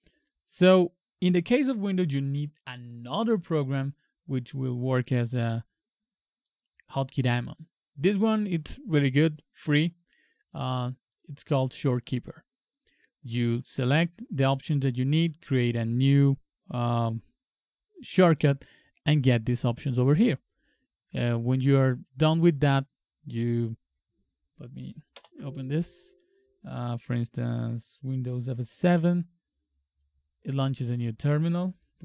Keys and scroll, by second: 25.1 ctrl+BackSpace, 28.9 super+F7.